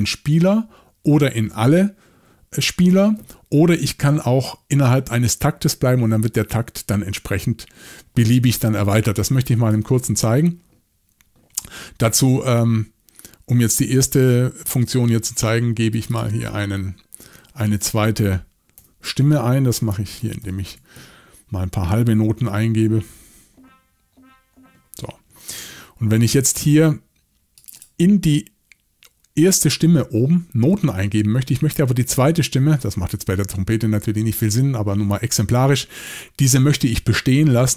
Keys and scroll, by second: 18.8 i, 20.4 alt+shift+v, 22.4 7, 25.3 Escape.